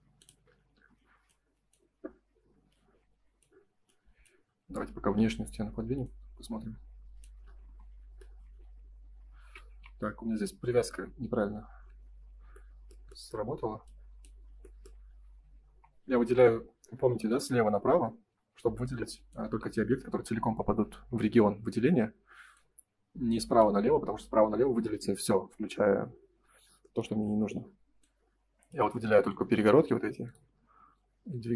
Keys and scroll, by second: 0.6 space, 7.6 space, 8.4 Escape, 9.4 ctrl+z, 10.3 F4, 11.5 ctrl+z, 13.4 F3, 14.5 F4, 26.5 Escape, 27.1 space.